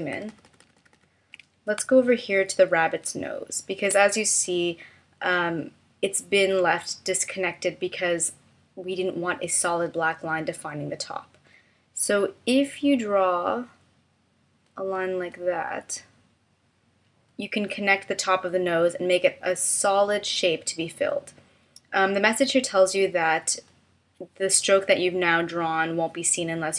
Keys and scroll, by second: 0.1 super+=, 1.8 space.